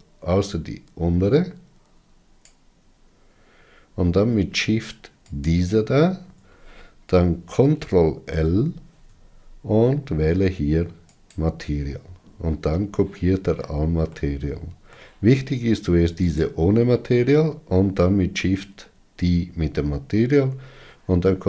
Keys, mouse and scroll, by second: 6.1 shift+click, 14.9-17.0 middle drag, 17.0 click.